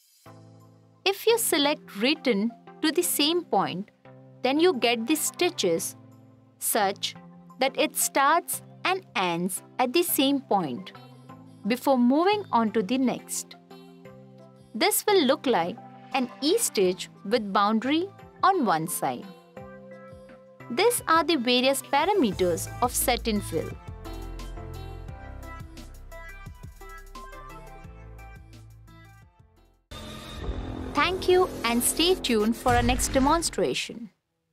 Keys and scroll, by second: 12.5 t, 21.1 t.